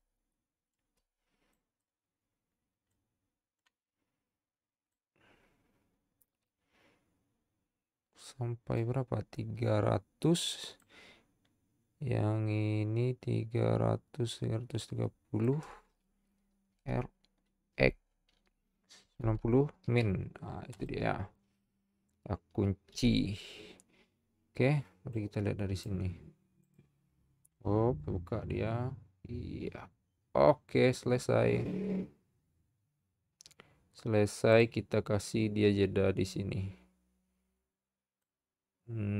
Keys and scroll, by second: 17.7 x, 19.8 typing, 23.0 i.